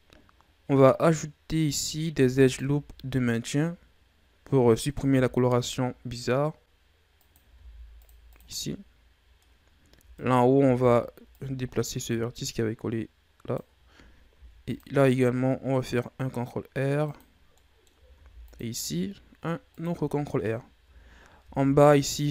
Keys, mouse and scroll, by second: 1.1-2.1 scroll up 4, 2.1 ctrl+r, 5.0 ctrl+r, 8.5-10.1 middle drag, 10.1 alt+right click, 11.2-14.3 drag, 14.3 ctrl+r, 17.3 scroll down 1, 17.5 middle click, 18.1 ctrl+r, 19.8 Tab, 20.8 Tab, 21.4 ctrl+Tab.